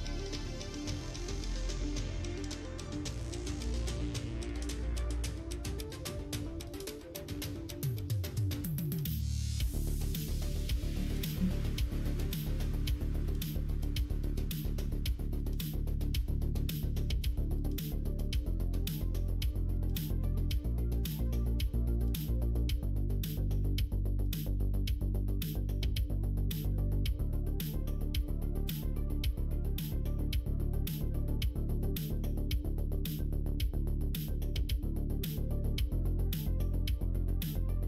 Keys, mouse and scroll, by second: 0.5-8.2 middle drag, 10.1 click, 15.6 middle click, 17.6 click, 18.3-22.5 drag, 23.2 middle click, 23.9 click, 24.2 middle click, 24.9 middle click, 25.6 middle click, 26.0 shift+middle click, 26.4 middle click, 27.2-28.9 middle drag, 29.8-33.4 middle drag, 33.7 shift+middle click, 34.6 middle click, 35.5 middle click.